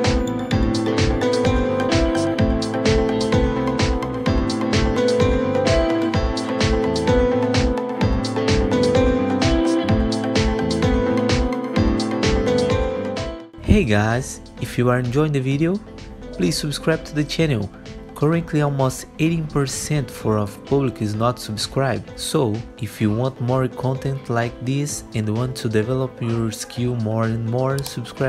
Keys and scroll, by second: 7.8 ctrl+shift+c, 8.9 alt+x, 12.8 ctrl+BackSpace, 15.5 alt+1, 19.3 alt+1, 24.8 alt+1.